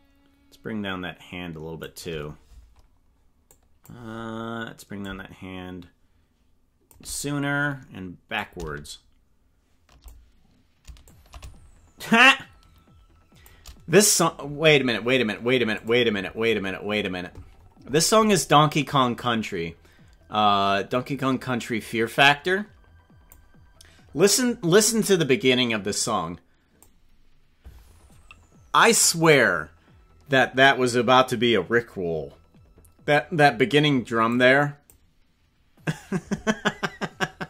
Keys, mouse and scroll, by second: 3.4 click, 5.0-7.0 shift+drag, 8.4-10.0 shift+drag, 11.0-13.6 shift+drag.